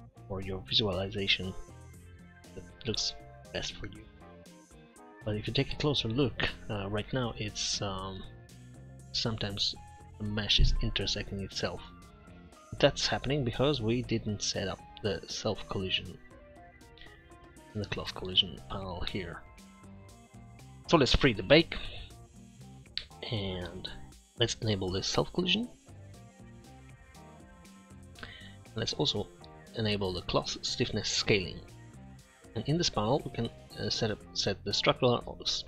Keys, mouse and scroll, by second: 26.7-27.6 middle drag.